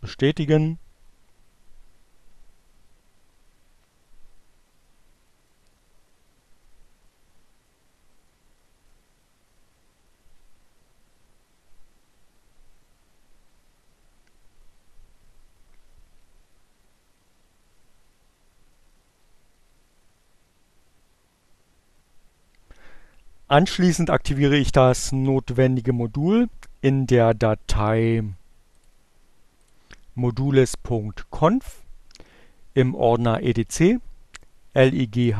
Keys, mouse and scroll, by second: 27.0 click, 28.1 click, 34.7-35.3 drag.